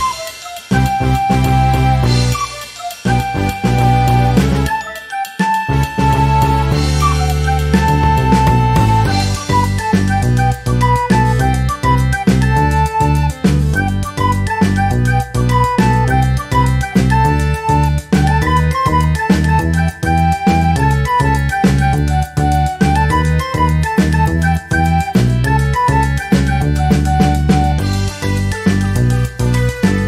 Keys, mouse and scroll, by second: 0.3 Delete, 1.2 click, 2.2 ctrl+d, 3.0 click, 4.2 click, 4.9 click, 5.4-6.7 drag, 6.8-8.7 drag, 9.0 click, 9.6 ctrl+shift+click, 10.2-13.4 ctrl+shift+drag, 13.7 shift+click, 14.6 ctrl+-, 16.1 ctrl+scroll up 2, 16.7 ctrl+click, 17.3-20.0 ctrl+drag, 21.4 click, 22.3-24.1 drag, 24.5 click, 25.2-26.5 drag, 27.1 click, 27.9-29.1 drag, 29.5 click.